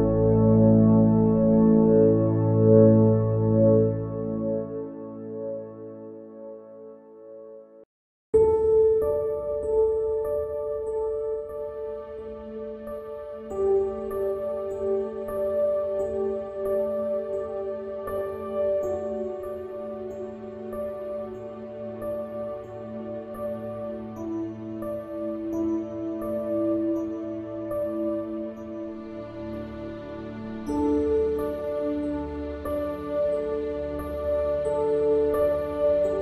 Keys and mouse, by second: 12.3 click.